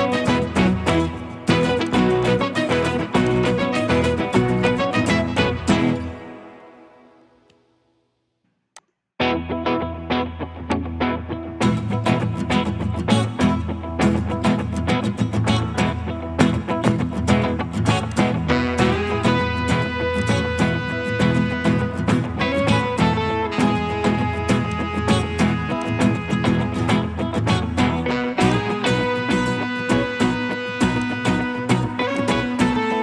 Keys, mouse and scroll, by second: 6.4-7.5 typing, 16.0 scroll up 1, 16.2 scroll down 1, 22.0 scroll up 1, 22.4-23.3 scroll down 1, 23.3 scroll up 1, 23.4 scroll down 1, 26.7-27.8 scroll up 1, 27.8-28.5 scroll down 1.